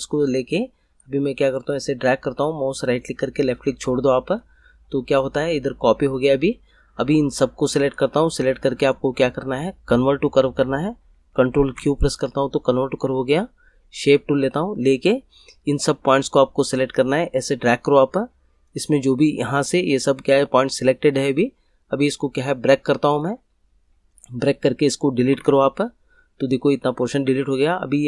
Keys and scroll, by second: 11.5 ctrl+q, 25.3 Delete.